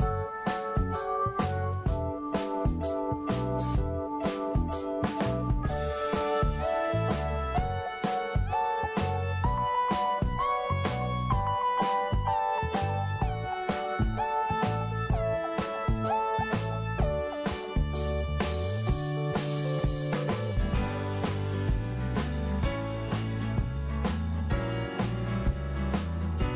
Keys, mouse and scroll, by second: 9.8-11.8 middle drag, 12.3 click, 15.2-15.8 scroll down 1, 15.8-17.7 middle drag, 17.7-18.6 scroll down 1, 18.6-20.7 middle drag, 20.7-22.9 scroll up 1, 23.3 scroll down 1, 24.7-26.5 drag.